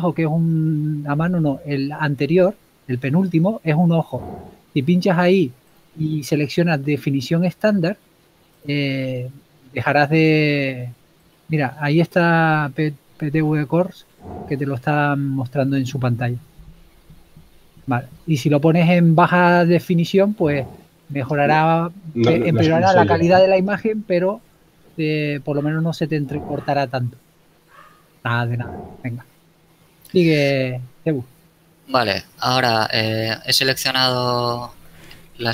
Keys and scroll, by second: 26.6 KP_3, 29.0 z, 34.3 z.